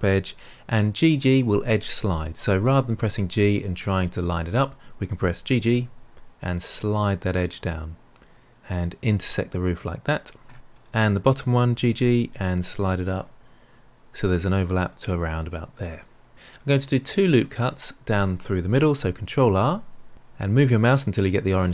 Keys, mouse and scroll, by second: 2.9 g, 5.5 g, 10.7 click, 11.7 g, 19.1 ctrl+r.